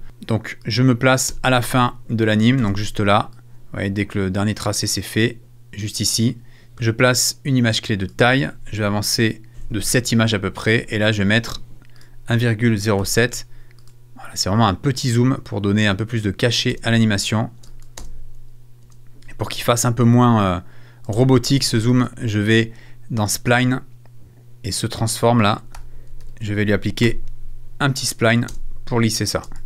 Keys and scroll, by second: 1.3 space, 2.6 space, 9.6 Right, 13.0 7, 16.7 space, 21.1 space, 25.7 super+f, 26.2 super+a, 27.0 super+s, 28.5 space.